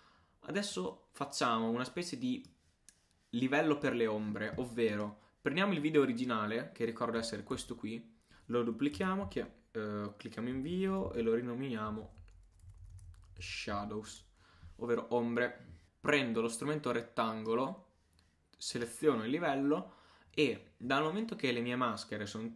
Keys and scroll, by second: 7.5 super+d, 9.3 shift+Return, 10.5 shift+s, 10.9 shift+h.